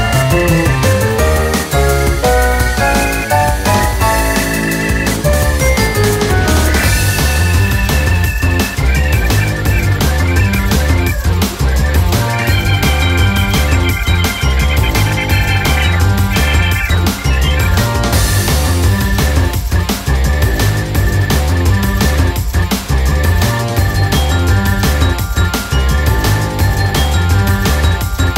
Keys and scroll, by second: 1.4 typing, 17.7 ctrl+-, 18.8 ctrl++, 21.7 ctrl+-, 21.8 ctrl++.